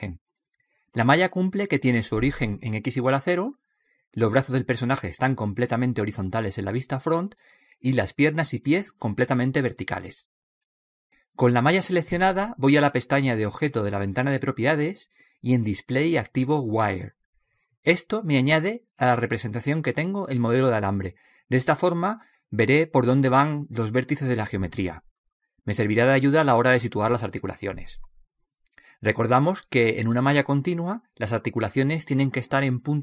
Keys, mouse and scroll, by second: 1.4-3.3 middle drag, 7.0 KP_1, 8.0-11.8 middle drag, 15.0-17.9 drag, 18.7 click, 20.5 middle click, 21.5 middle click, 21.6 middle click, 21.8-26.7 middle drag.